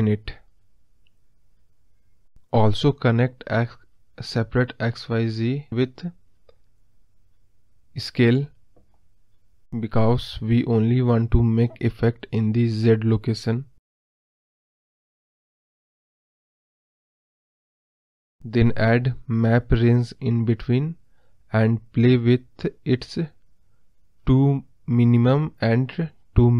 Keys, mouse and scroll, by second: 0.7 click, 5.0-6.4 drag, 7.8 ctrl+z, 13.8 g, 16.0 ctrl+z, 23.4-26.2 drag.